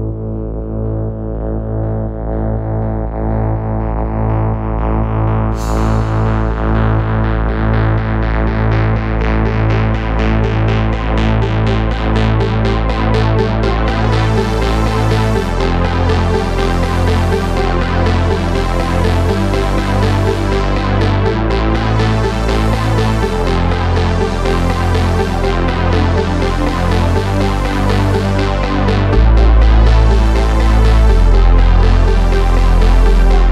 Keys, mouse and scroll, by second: 1.3 click, 2.9 ctrl+r, 4.4 ctrl+r, 6.3 z, 8.9 z, 10.9 middle click, 11.7 KP_3, 12.7 ctrl+r, 14.3 ctrl+r, 16.0 ctrl+r, 19.2-20.3 drag, 20.3 right click, 20.6 click, 21.8 click, 24.9 KP_3, 25.0 z, 25.2 c, 26.3 z, 26.8 click, 28.5 click, 30.1 a, 30.5 Tab, 32.9 right click, 33.0 Tab.